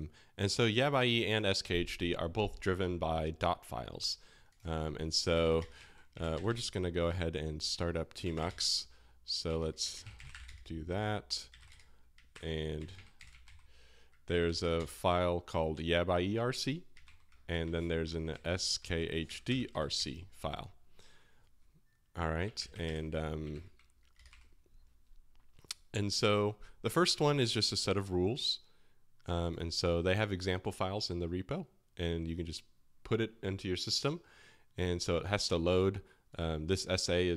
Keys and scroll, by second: 5.1-6.4 typing, 6.1 Escape, 7.5-15.2 typing, 12.3 super+p, 17.0 super+p, 17.8-20.4 typing, 22.6 ctrl+w, 22.8 v, 23.6 ctrl+h, 24.1 space, 24.2 space, 24.3 p.